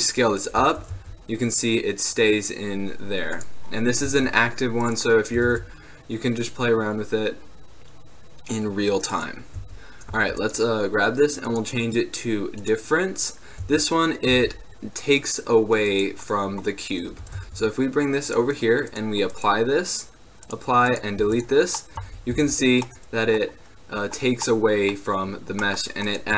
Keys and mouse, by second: 0.7 g, 3.9-5.5 drag, 4.2 s, 5.5 g, 9.7 z, 10.3 z, 10.5-13.2 drag, 13.7 z, 14.4 z, 16.0 right click, 17.4 g, 19.1 right click, 20.6 right click, 21.3 x, 21.9-22.5 middle drag, 22.5 z, 26.2 right click.